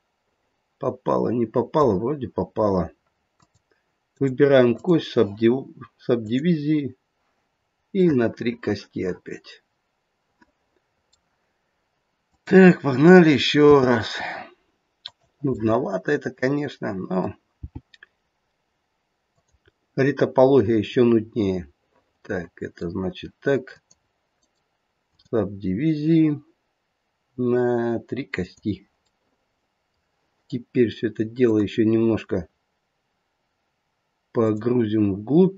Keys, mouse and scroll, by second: 3.3 click, 4.1 right click, 6.1 click, 7.6-8.1 scroll up 2, 8.1 middle click, 12.2 click, 13.6 e, 15.6 middle click, 17.5 g, 19.7 middle click, 21.8 middle click, 22.1 middle click, 23.6 click, 24.3 right click, 28.3 click, 29.2 middle click, 31.4 click, 34.3 click.